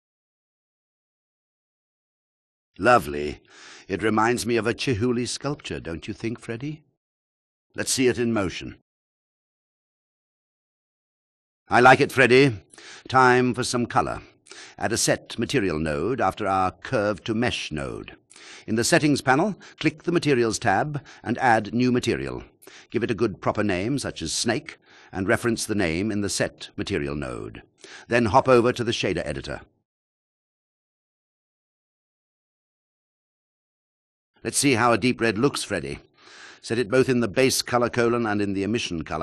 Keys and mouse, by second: 2.1 alt+click, 4.6 ctrl+click, 8.2 ctrl+drag, 8.6 shift+click, 9.7 click, 10.4 drag, 13.5 ctrl+click, 14.2 ctrl+drag, 17.0 click, 20.1 click, 20.9 shift+a, 22.2-22.7 drag, 24.0-27.1 drag, 28.7 click, 30.5 click, 32.2 shift+click, 33.8 drag, 34.9 click, 36.7 click.